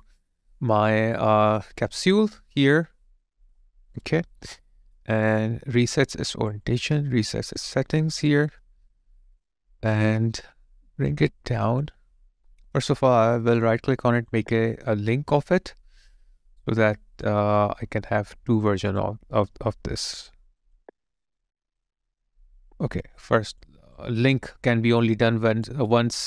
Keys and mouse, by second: 4.1 alt+right click, 5.0 alt+middle click, 8.3 alt+right click, 8.6 alt+middle click, 13.2 right click, 18.9 right click, 24.0 alt+click, 25.7 alt+click.